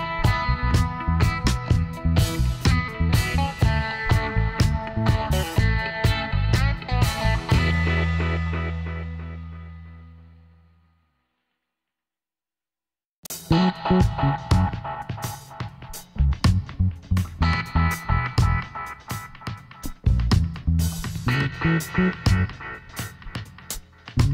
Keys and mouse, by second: 0.9 KP_7, 4.0-5.8 right drag, 5.0 s, 7.8-9.4 middle drag, 9.0-11.0 drag, 9.0-10.1 right drag, 11.0-14.9 middle drag, 14.1 k, 18.1 middle click, 18.5 Tab, 20.2 KP_7, 22.9 Tab, 23.5 right click.